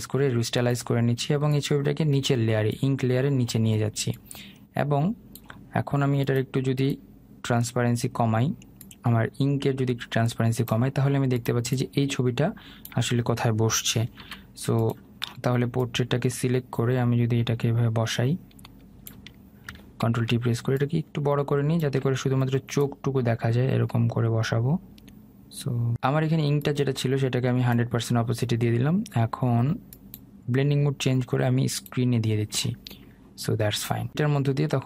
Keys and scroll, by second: 14.2 ctrl+z, 19.7 ctrl+t.